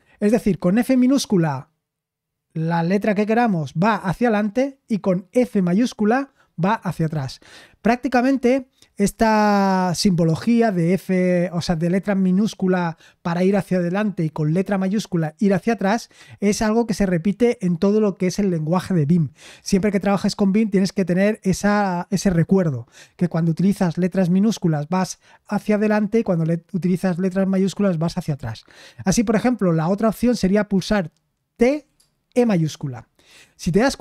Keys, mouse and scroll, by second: 31.6-32.3 typing.